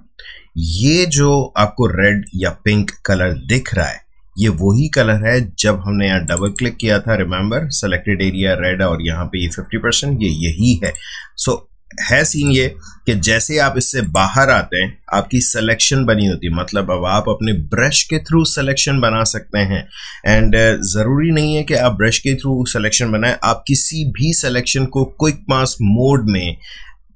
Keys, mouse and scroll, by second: 6.2 click, 10.8 click.